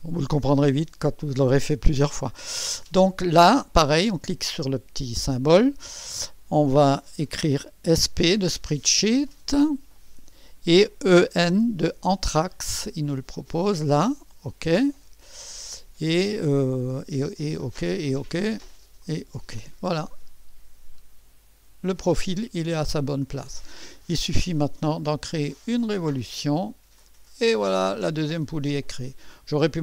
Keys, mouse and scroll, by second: 2.1 click, 4.2 click, 7.6-8.5 typing, 7.9 click, 9.9 click, 10.5-12.0 typing, 13.3 click, 14.9 click, 19.0 click, 25.5 click, 27.0 click, 27.9-29.5 drag.